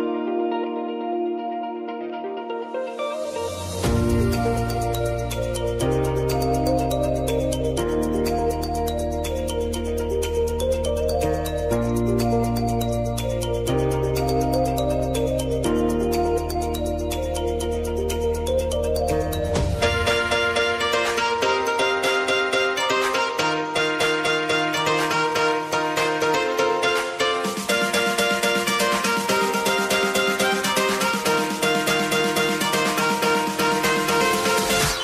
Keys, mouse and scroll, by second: 1.1 u, 1.9 click, 2.2 space, 4.9 click, 6.2 ctrl+d, 7.8 click, 9.6 s, 10.2-11.6 drag, 11.8 ctrl+a, 12.4-17.7 typing, 19.0 click, 21.2-21.8 typing, 22.4-30.3 drag, 32.6-35.0 drag.